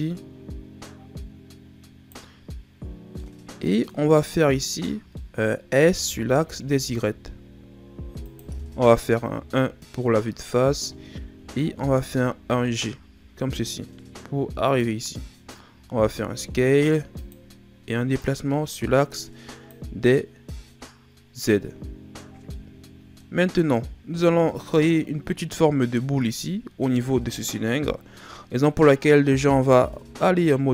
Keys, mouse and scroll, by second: 3.2 middle click, 3.9-4.9 scroll up 2, 4.9 scroll up 1, 5.1 middle click, 5.7 s, 9.3 KP_1, 10.5-11.5 scroll down 6, 11.5-12.0 shift+scroll down 7, 12.4 g, 15.2-15.6 scroll up 1, 15.7 s, 18.2 click, 22.3 ctrl+scroll down 4, 22.5 middle click, 23.3 scroll up 3, 23.9 shift+scroll down 2, 25.4-26.2 scroll up 1, 29.6 ctrl+Tab.